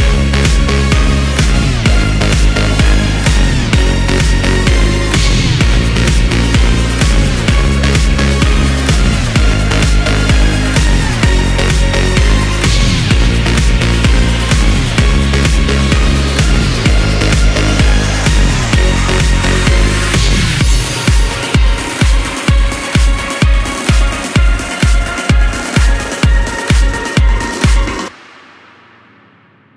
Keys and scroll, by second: 4.9 ctrl+shift+q, 26.1 ctrl+k.